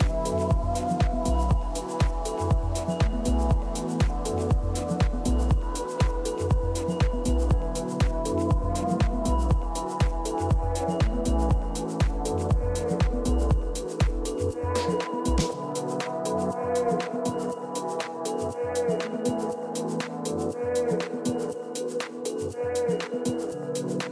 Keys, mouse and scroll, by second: 0.0-0.6 typing, 1.5-3.1 middle drag, 3.6-4.9 middle drag, 3.6 a, 4.1 a, 4.9-6.7 right drag, 5.5 a, 6.7 b, 8.4-10.1 drag, 10.4 a, 11.3 a, 11.6 a, 13.6-19.0 middle drag, 19.0 a, 19.3 a, 20.3 b, 21.5-23.4 drag, 22.8 a, 23.5-24.1 middle drag.